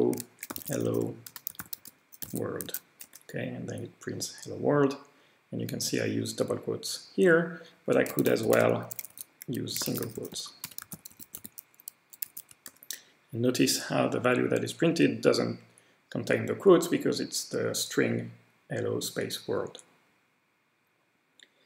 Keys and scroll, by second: 0.0-3.2 typing, 7.8-14.0 typing.